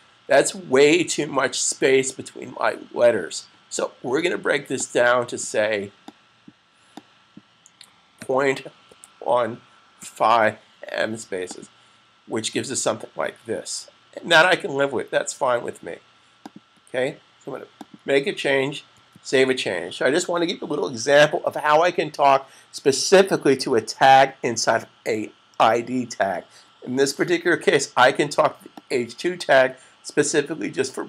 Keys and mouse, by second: 4.5 click, 10.1-10.9 typing, 16.0 click, 17.9 super+click, 28.6 click.